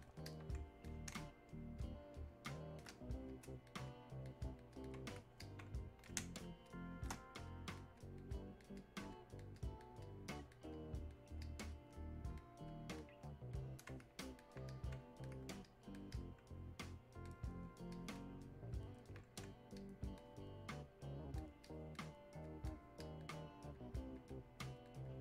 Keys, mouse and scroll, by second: 1.2 space, 1.8 click, 1.9 space, 3.3-6.2 drag, 6.2 space, 6.7 click, 6.7 space, 7.5 click, 10.1 click, 10.8-12.7 drag, 14.2 alt+click, 14.7 click, 15.7-18.0 alt+drag, 19.8-21.7 drag.